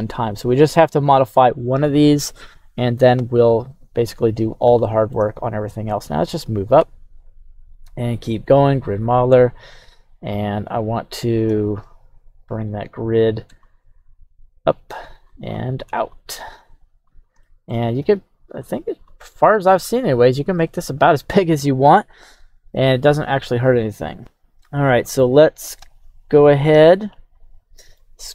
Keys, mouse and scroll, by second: 0.4-0.8 middle drag, 3.2 KP_3, 3.8-4.6 scroll up 4, 4.8-5.1 shift+middle drag, 5.3-5.9 right drag, 5.9-6.2 scroll down 1, 6.7 Tab, 7.2 right click, 7.8 g, 9.1-9.7 scroll, 10.4-10.8 scroll down 1, 10.9-11.4 scroll down 1, 16.8 scroll, 17.4-18.4 shift+middle drag, 24.9-28.3 alt+middle drag, 26.3 scroll up 1.